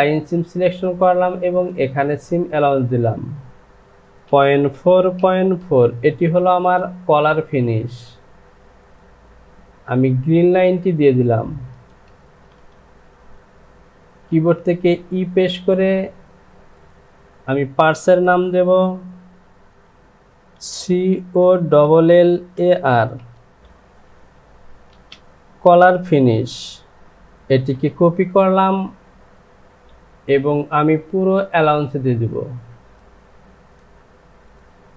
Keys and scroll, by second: 3.8 Down, 4.2 KP_Decimal, 4.7 KP_4, 4.9 Down, 5.6 KP_Decimal, 14.3 e, 21.2-23.2 typing, 24.9 space, 27.5 ctrl+c.